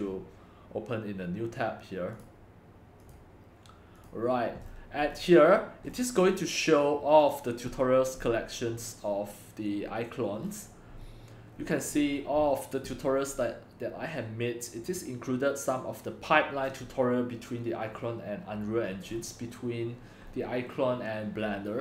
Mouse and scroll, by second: 3.1-4.7 drag, 4.7-5.9 scroll down 7, 5.9-6.3 scroll down 7, 6.3-6.7 scroll up 1, 6.7 middle click, 6.7-7.3 scroll down 1, 7.3-10.2 drag, 10.4 click, 10.4-11.0 scroll down 3, 11.0-11.9 scroll down 6, 11.9 scroll up 2, 12.0-17.1 middle drag, 12.0-12.4 scroll, 19.1-21.8 middle drag, 19.1-20.3 scroll, 20.3-21.4 scroll, 21.4-21.8 scroll.